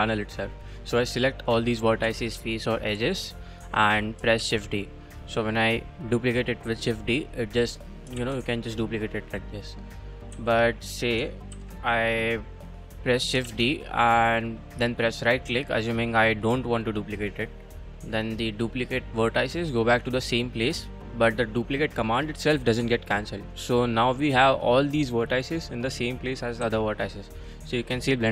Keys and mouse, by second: 2.0 2, 2.3 3, 2.9 1, 4.4 shift+d, 7.2 click, 8.2 shift+d, 9.0 click, 10.3 a, 10.7 click, 11.5 ctrl+l, 13.4 shift+d, 17.3 click, 26.2 click, 26.6 g.